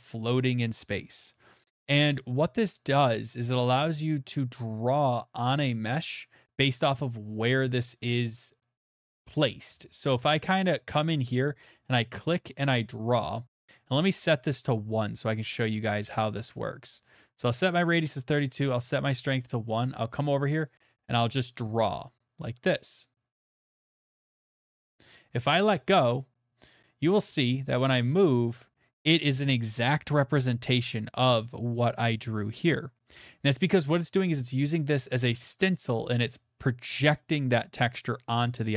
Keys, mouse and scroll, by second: 0.9 middle click, 1.8 right click, 5.1 click, 9.1 middle click, 10.4-15.4 shift+middle click, 13.0 click, 14.1-14.6 scroll, 17.1 click, 18.4 click, 25.8 click, 30.6 shift+middle click, 31.3-35.6 shift+middle drag.